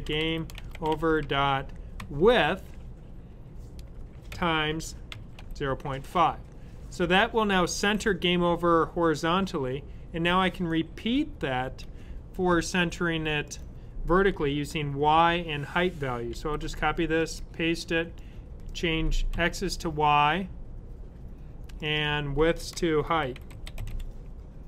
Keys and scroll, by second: 0.0-1.9 typing, 3.9-6.0 typing, 16.2 c, 17.9-19.7 typing, 22.9-24.3 typing.